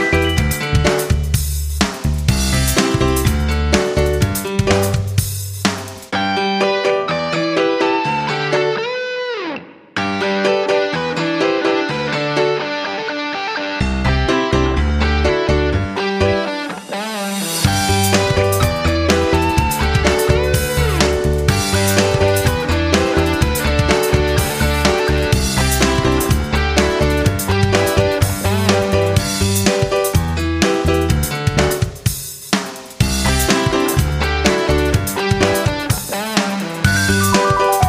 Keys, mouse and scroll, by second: 6.0-12.2 drag, 12.3-16.9 shift+drag, 17.9 shift+click, 18.9 click, 21.0 shift+click, 21.7 shift+click, 24.2 Delete, 25.4 click, 26.1 Delete, 26.9 click, 34.5 shift+click, 36.1 click.